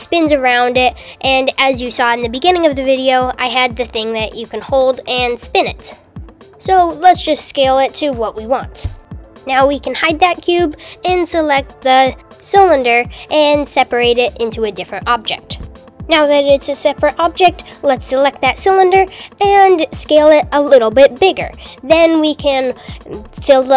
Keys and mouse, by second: 6.2-8.5 typing, 7.4 super+z, 9.7 l, 10.5 h, 11.0 click, 11.4 f, 12.0 p, 13.1 Tab, 17.3 Tab, 17.5 click, 18.3 Tab, 19.4 a, 19.7 s.